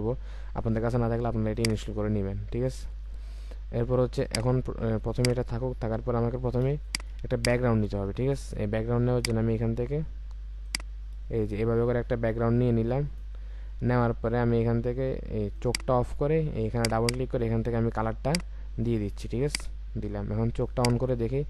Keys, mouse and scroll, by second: 4.2 ctrl+click, 6.0-6.5 alt+scroll up 1, 6.7 space, 7.3 ctrl+click, 17.0 double click.